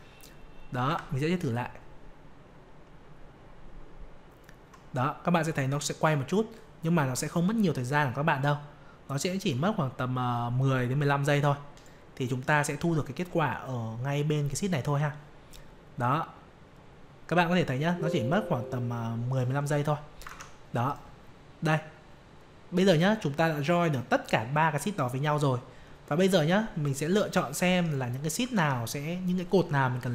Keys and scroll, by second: 0.8 F5, 20.2 alt+Tab, 28.5 alt+Tab.